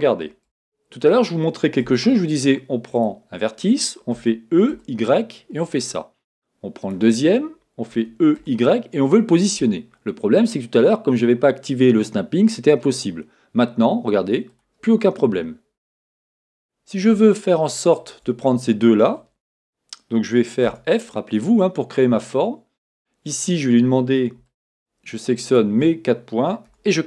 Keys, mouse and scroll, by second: 0.0-2.9 middle drag, 1.8 Tab, 2.9 click, 4.1 e, 5.7 click, 6.8 click, 7.9 e, 14.6 click, 18.0 shift+click, 20.7 f, 24.5 shift+click, 25.5 shift+click, 26.7 f.